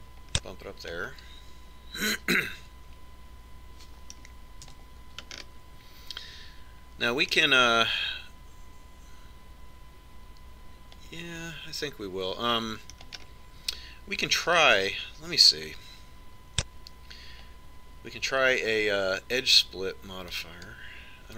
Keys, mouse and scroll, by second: 0.3 click, 2.2-4.2 middle drag, 6.5 Tab, 7.0-11.0 middle drag, 14.9-16.8 middle drag, 16.5 click.